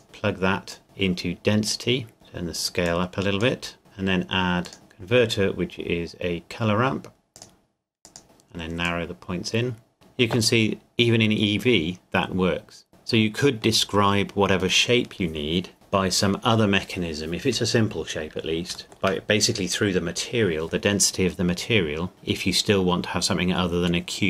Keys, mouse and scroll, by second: 2.1-2.6 scroll down 1, 2.9 click, 7.3 click, 8.2-8.8 scroll up 1, 8.8 click, 10.7-12.8 scroll down 1, 13.1 middle click, 18.7 shift+Num_Lock, 18.8 shift+middle click, 20.9-22.1 scroll up 1.